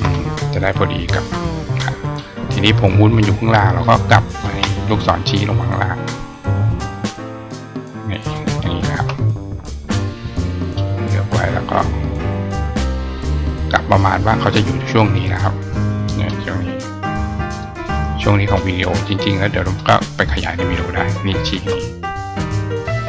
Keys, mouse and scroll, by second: 0.9 click, 2.0 click, 2.9 click, 3.6 ctrl+click, 5.3-8.1 drag, 8.7 shift+click, 9.9 click, 11.1-13.7 drag, 14.4 click, 15.1 right click, 17.4 click, 19.0 click, 22.5 click.